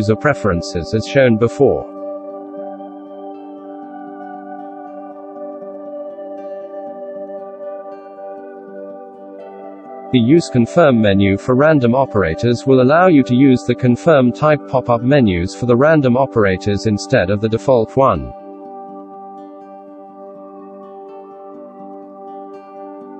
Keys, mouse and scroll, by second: 4.5 shift+q, 8.2 F4, 17.8 Tab, 18.6 alt+a, 19.2 right click, 20.2 ctrl+shift+right click, 21.1 shift+right click, 21.6 shift+right click, 22.1 Tab, 22.4 shift+q.